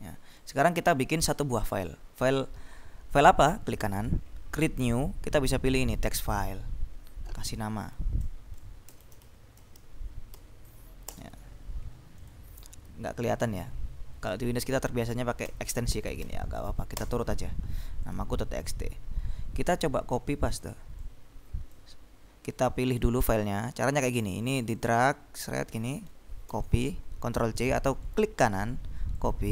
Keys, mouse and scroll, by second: 0.5 click, 3.6 right click, 6.4 click, 8.8-10.5 typing, 11.3 Return, 12.4 click, 14.4 F2, 14.6 End, 15.3-16.8 typing, 17.1 Return, 18.3 click, 20.7 click, 22.7 click, 24.5 click, 26.6 ctrl+c, 28.2 right click, 29.3-29.5 drag.